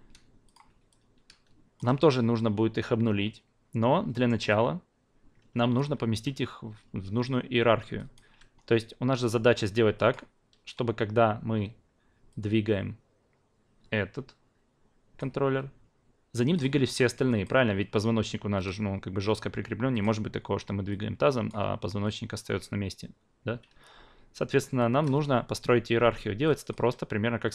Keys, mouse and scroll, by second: 1.1 alt+click, 4.1 alt+middle drag, 4.5 alt+click, 7.9 alt+click, 9.4 drag, 9.9 alt+click, 12.3-15.2 drag, 15.3 ctrl+z, 16.5-20.0 drag, 20.9-21.5 drag, 23.6 ctrl+z, 24.5 alt+middle click, 24.8 alt+click, 26.4 alt+click.